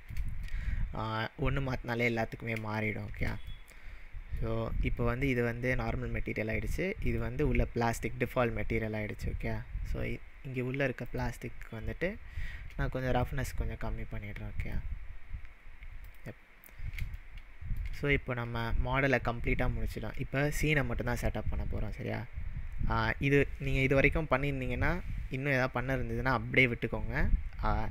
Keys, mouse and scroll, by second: 2.0-2.5 scroll down 3, 2.9-3.3 shift+middle drag, 5.3 click, 7.1 click, 9.3-10.5 scroll up 3, 10.5-11.0 scroll up 4, 11.1 click, 13.2-14.7 drag, 16.4-17.1 scroll down 9, 17.2-18.0 shift+middle drag.